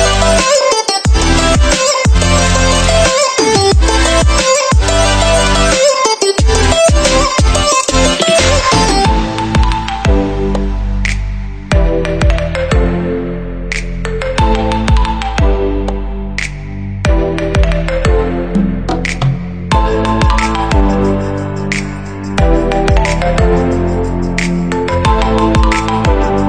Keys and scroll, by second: 15.0 ctrl+=.